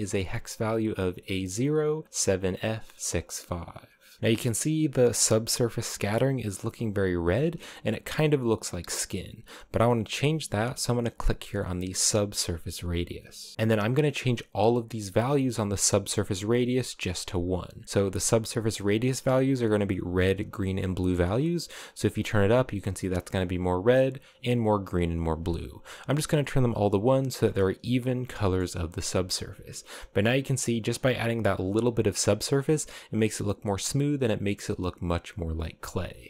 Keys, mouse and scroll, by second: 4.2-5.2 scroll up 2, 7.0-8.6 shift+middle drag, 8.6-10.2 scroll up 1, 10.9-14.9 drag, 27.1-27.9 scroll down 3, 28.0-29.0 shift+middle drag, 29.0-29.5 scroll up 4, 31.2-32.5 drag, 34.5 click, 35.7-36.1 scroll down 5, 36.2 shift+middle click.